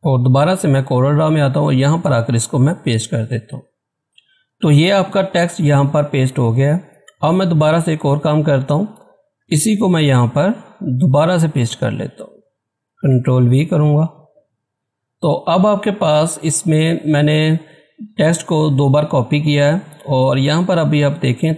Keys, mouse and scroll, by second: 10.0 Return, 12.8-13.2 scroll up 1, 13.2 ctrl+v, 14.7-15.5 scroll down 1, 15.5-16.0 scroll up 1, 20.3 scroll up 1, 20.6 typing.